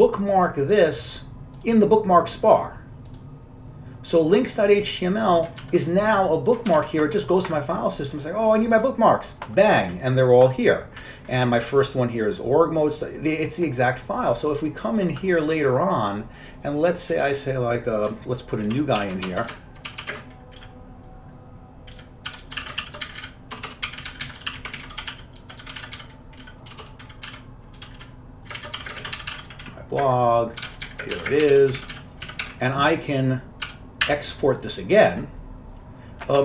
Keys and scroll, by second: 5.8 ctrl+w, 6.8 ctrl+w, 17.3 Return, 20.2-34.3 typing.